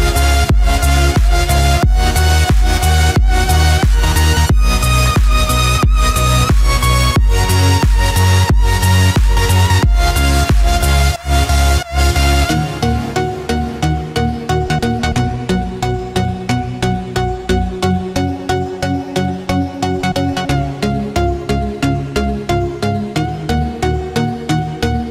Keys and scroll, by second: 5.0 ctrl+=, 18.1 ctrl+d.